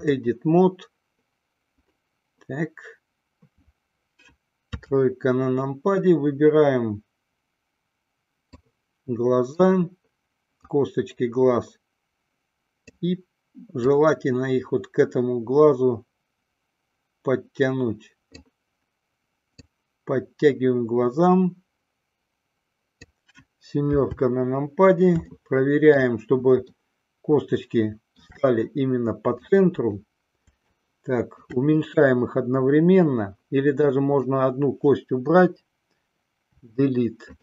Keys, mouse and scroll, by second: 4.8 KP_3, 9.0-10.0 drag, 11.2-13.3 drag, 14.3-18.9 drag, 19.8-23.5 drag, 24.1 KP_7, 25.6 shift+middle click, 27.0-28.6 shift+middle drag, 29.7 click, 31.0 shift+click, 34.2 click, 36.7 Delete.